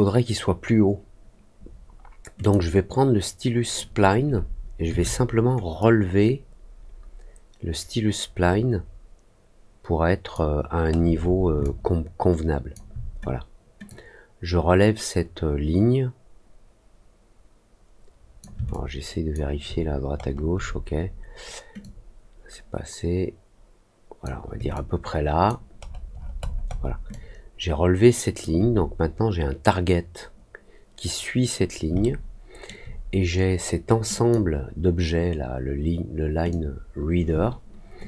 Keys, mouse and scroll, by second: 2.3 click, 5.7-10.3 drag, 10.8 middle click, 11.1 middle click, 11.6-12.7 alt+drag, 13.8-18.3 drag, 18.6 alt+click, 19.6 alt+middle click, 20.1 alt+middle click, 21.7-24.2 drag, 24.7 alt+click, 25.8 alt+middle click, 26.0 alt+middle click, 26.3 alt+middle click, 26.7 alt+middle click, 27.0-28.3 alt+drag, 31.9 alt+middle click, 34.1 click, 36.4-38.0 drag.